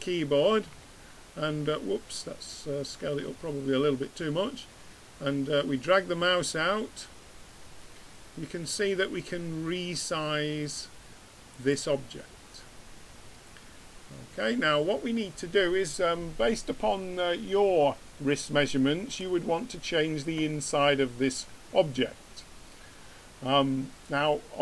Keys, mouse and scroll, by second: 0.7 s, 12.2 middle click, 20.6-22.4 middle drag.